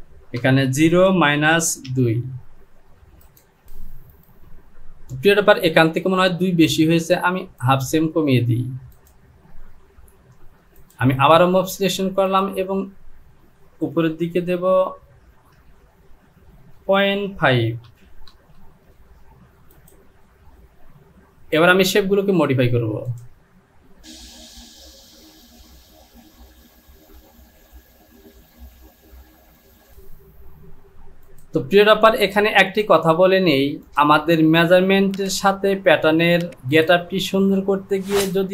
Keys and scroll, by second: 0.4 KP_0, 0.7 Down, 15.1 Down, 15.5 Down, 16.8 KP_Decimal, 17.9 KP_5, 18.0 Down, 18.3 KP_0, 18.5 Down.